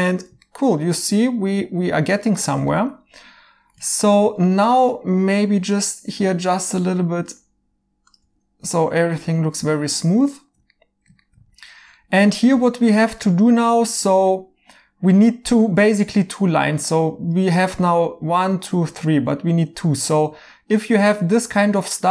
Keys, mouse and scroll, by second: 2.2 right click, 5.0 1, 9.7 right click, 9.7 2, 14.3 right click.